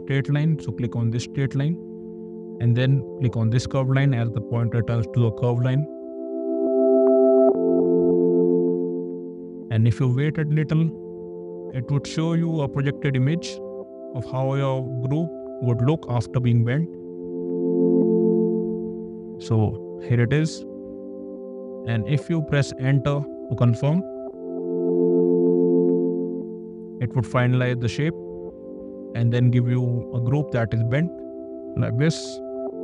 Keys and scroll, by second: 23.8 Return.